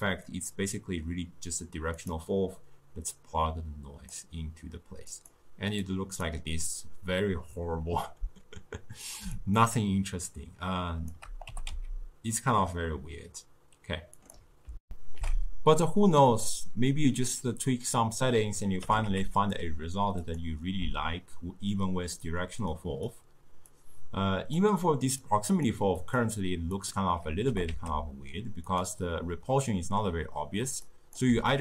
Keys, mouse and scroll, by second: 3.1 drag, 5.2 click, 5.9 click, 9.4-11.5 shift+drag, 11.5 g, 14.8 ctrl+alt+shift+w, 18.8 g, 22.8-23.8 drag, 25.3 click, 26.4-27.5 drag, 27.5 g, 30.9 click.